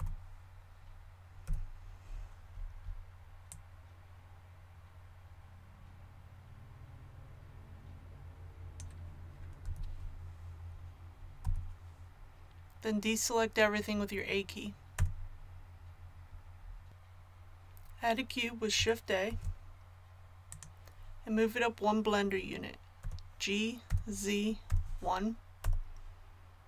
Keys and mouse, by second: 1.4 z, 3.5-5.4 drag, 9.6 z, 11.4 KP_1, 14.9 a, 19.3 shift+a, 23.0 g.